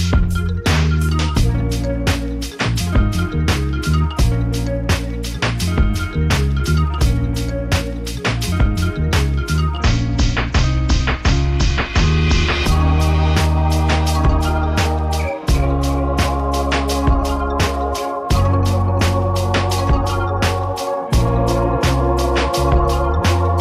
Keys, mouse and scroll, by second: 1.1 click, 3.6 click, 5.0 click, 9.5 click, 12.7 click, 13.7 click, 18.8 click, 21.2 click.